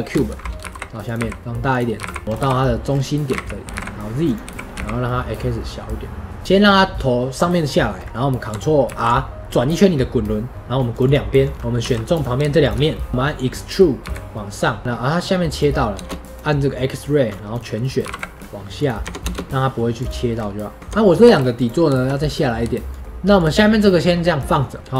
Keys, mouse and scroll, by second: 0.1-0.5 shift+middle drag, 0.5 g, 2.2 KP_3, 2.8-3.2 scroll up 1, 3.2 g, 6.4-8.8 middle drag, 8.8 ctrl+r, 11.5 middle click, 11.7 3, 13.5 middle click, 13.9 e, 14.8-16.2 middle drag, 16.2-17.4 drag, 18.9 Tab, 20.2-20.8 scroll down 1, 20.8 Tab, 20.9-24.9 middle drag.